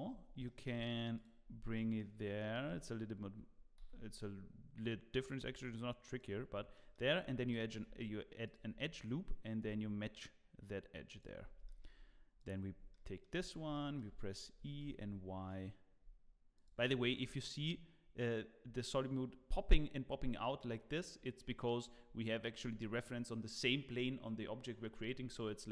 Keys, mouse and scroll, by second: 0.2-0.5 scroll down 2, 0.4 shift+middle click, 1.1 click, 1.4 scroll down 2, 1.7 shift+middle click, 2.6 e, 6.4 scroll up 3, 6.7 shift+middle click, 7.7 ctrl+r, 11.4 scroll down 2, 11.6 shift+middle click, 12.4 click, 12.7-13.2 scroll down 3, 12.9 shift+middle click, 13.2 scroll up 2, 13.5 scroll down 1, 13.7 shift+middle click, 14.0 scroll up 1, 14.6 g, 17.2 scroll up 1, 17.5-18.6 scroll down 3, 18.6-19.1 scroll up 1, 19.1-19.5 scroll down 1, 19.7-20.2 scroll up 1, 20.4 scroll down 1, 20.6 scroll up 1, 20.8 scroll down 1, 21.1-21.6 scroll up 1, 21.8-22.1 scroll down 2, 25.4-25.7 scroll up 3.